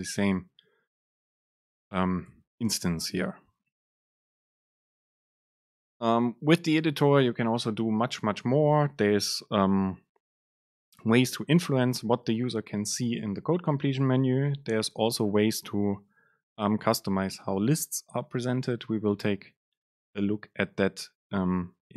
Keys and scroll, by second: 0.1 BackSpace.